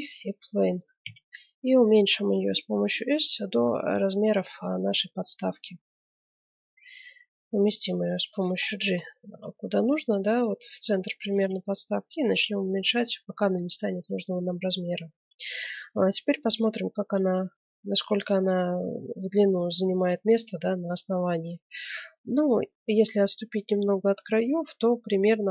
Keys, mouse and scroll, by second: 1.0 s, 4.6-6.5 middle drag, 5.1 g, 8.7-10.9 middle drag, 9.3 g, 11.3 s, 13.4-20.4 middle drag.